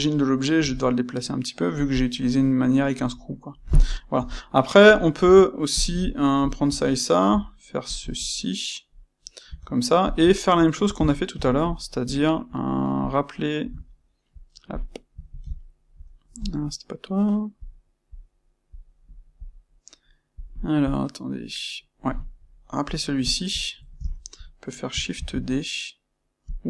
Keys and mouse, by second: 0.5 c, 1.8 click, 2.3-4.1 middle drag, 4.1 KP_3, 5.1 Tab, 5.7 click, 6.3 shift+click, 7.2 c, 7.9 click, 9.4 Tab, 10.0 click, 10.2-13.0 ctrl+middle drag, 13.0 click, 13.8-17.5 shift+middle drag, 17.5 click, 18.1 click, 18.6 click, 19.3 click, 20.3 click, 20.8 click, 22.8 click, 23.3-26.5 shift+middle drag, 25.1 shift+d, 26.5 click.